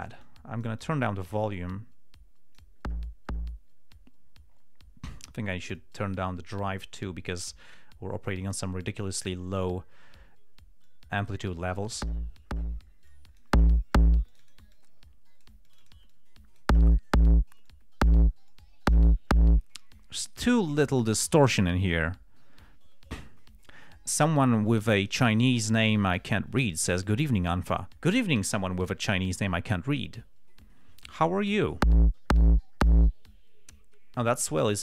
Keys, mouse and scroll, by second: 0.3-3.1 drag, 6.1 click, 7.8 click, 9.5 click, 11.2-12.5 drag, 13.4 click, 14.6 click, 15.1-16.0 drag, 16.0 click, 17.1 click, 18.0-18.6 drag, 18.8-19.4 drag.